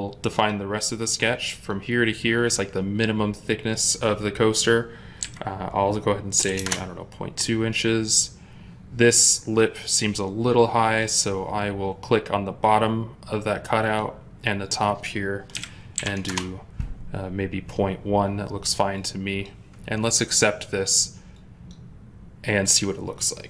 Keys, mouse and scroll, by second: 5.1 typing, 6.3 typing, 6.4 Return, 15.4-16.2 typing, 16.1 Return.